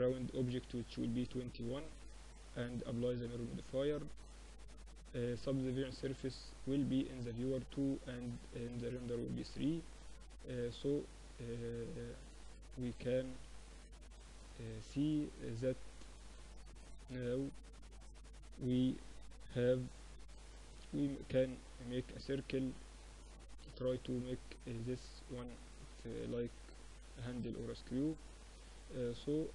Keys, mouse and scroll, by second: 1.0 middle click, 1.8-3.6 drag, 4.3-6.0 drag, 6.6-9.0 drag, 8.6 z, 9.0-10.2 middle drag, 9.0 z, 12.3 z, 13.8-19.6 middle drag, 19.6-21.5 drag, 20.1 shift+a, 28.2-29.5 middle drag.